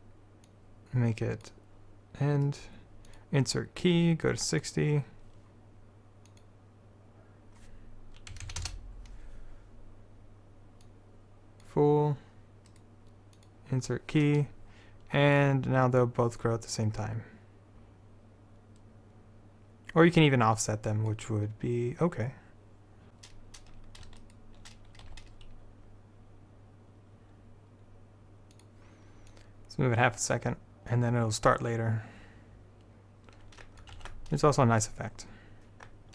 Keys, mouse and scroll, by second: 11.9 click, 12.8-15.5 right drag, 15.5-18.5 drag, 23.1 g, 24.3-27.3 drag, 25.2 g, 29.4-31.1 drag, 34.1 alt+a.